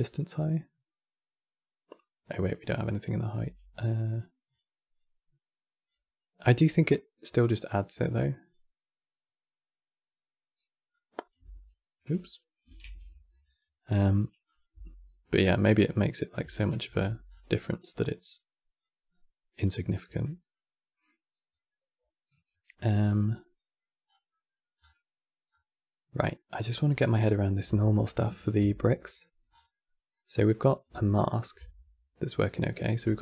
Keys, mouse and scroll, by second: 2.3 middle click, 3.1 q, 4.6-7.7 drag, 7.8-10.7 drag, 11.1 x, 12.5 ctrl+z, 13.5 middle click, 14.1 click, 14.4 x, 15.2 middle click, 16.0 click, 16.2 alt+click, 16.7 x, 17.0 scroll down 6, 17.3-18.5 middle drag, 18.5 click, 19.6-21.2 middle drag, 21.2 click, 22.2 middle click, 22.7 scroll down 6, 22.9 middle click, 23.8 scroll down 3, 24.0 middle click, 24.6-25.0 scroll down 3, 25.2-25.5 scroll up 4, 26.0 middle click, 26.4-27.0 scroll up 7, 27.0 middle click, 27.8 ctrl+shift+click, 28.6 middle click, 29.2 scroll down 6, 29.4 middle click, 30.3 scroll up 4, 30.9 ctrl+shift+click, 32.1-32.5 scroll up 2, 32.5-32.9 scroll down 2, 32.9-33.2 shift+middle drag.